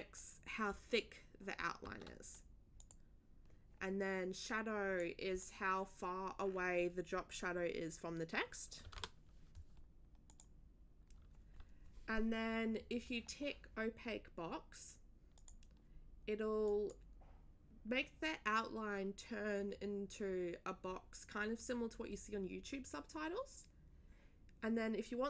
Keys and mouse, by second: 2.8 click, 3.1 click, 5.0 click, 8.8 2, 10.3 click, 15.3 click, 16.6 click.